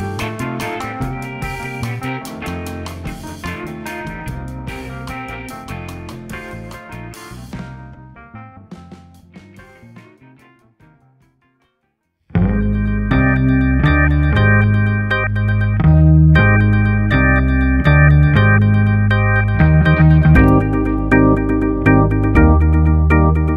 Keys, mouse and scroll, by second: 1.0 ctrl+p, 2.7 click, 3.0-4.6 middle drag, 4.6 KP_7, 5.2 KP_7, 5.9 KP_Divide, 7.3 click, 8.8 g, 14.3 KP_7, 15.6 r, 19.1-22.2 middle drag.